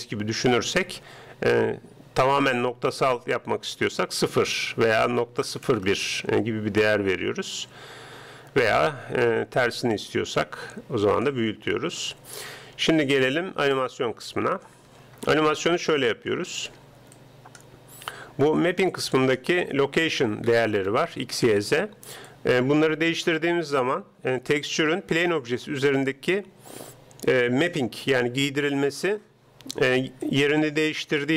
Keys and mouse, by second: 4.4-5.9 drag, 8.7-10.6 drag, 14.5-16.5 right drag, 17.2-20.5 drag, 22.3-24.1 drag, 30.3-31.3 drag.